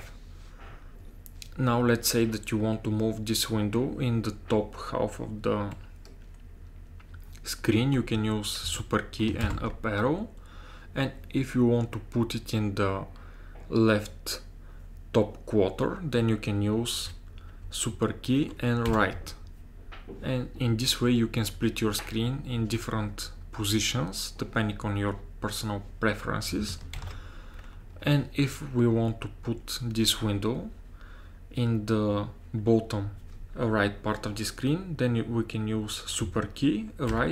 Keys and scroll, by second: 9.5 super+Up, 18.9 super+Left, 27.0 ctrl+alt+t, 37.1 super+Right.